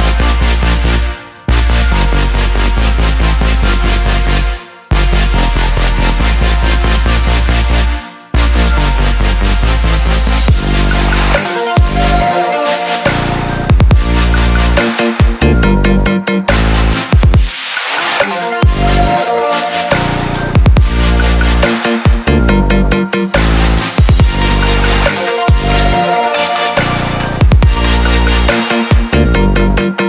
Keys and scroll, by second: 14.1-14.9 typing.